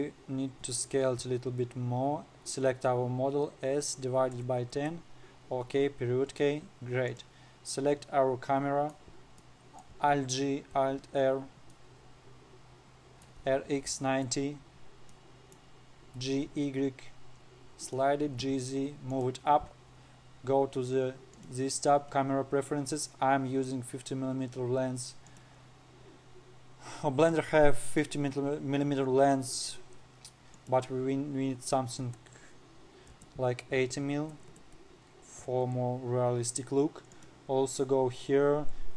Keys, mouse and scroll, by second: 0.2 click, 1.1 s, 6.2 KP_Decimal, 6.9-7.6 scroll up 4, 7.6 click, 8.1-8.6 scroll up 7, 8.6-10.7 middle drag, 10.7 alt+g, 11.3 alt+r, 11.9-12.3 scroll up 1, 12.3-13.9 middle drag, 13.9 r, 15.6-16.7 middle drag, 16.7 g, 18.9 g, 21.9 click, 25.8-28.6 drag, 31.1-34.2 drag, 34.4 m, 35.0 BackSpace, 37.7 click.